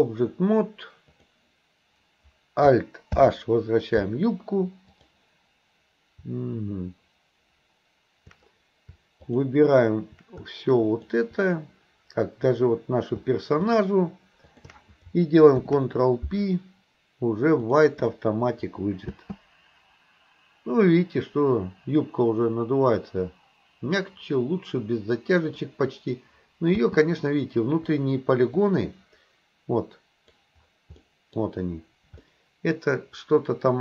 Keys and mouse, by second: 3.2 alt+h, 4.9 click, 10.9 shift+click, 15.6 ctrl+p, 19.2 space, 24.1-25.7 middle drag, 26.8 space, 28.7-30.5 drag, 31.0-31.4 middle drag, 32.3-33.8 middle drag.